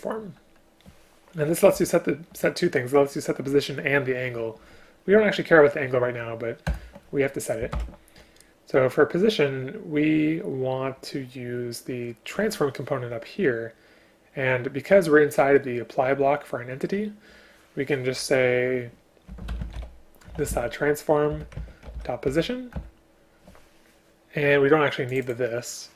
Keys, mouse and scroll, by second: 1.8 Down, 6.7 Return, 7.8 ctrl+p, 21.3 Return, 22.8 Return.